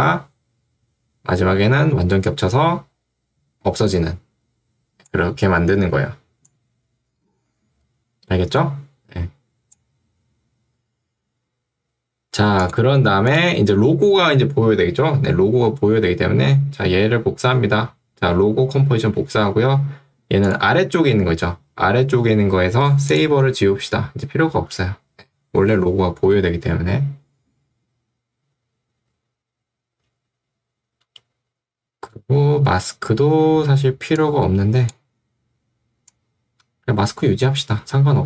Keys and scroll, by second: 19.4 ctrl+d, 32.8 m.